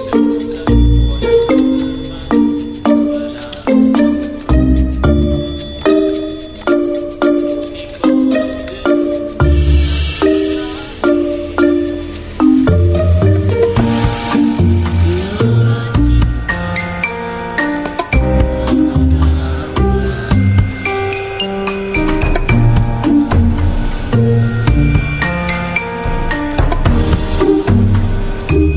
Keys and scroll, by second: 6.5 v.